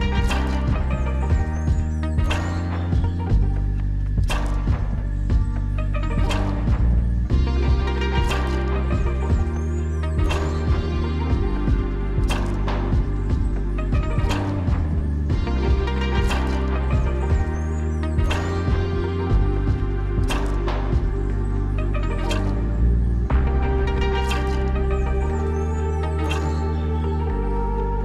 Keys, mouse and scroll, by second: 2.7 click, 3.6 click, 11.2 click, 13.6-14.2 scroll down 1, 15.7 click, 19.3 click, 19.3 scroll up 1, 27.4-28.0 scroll down 1.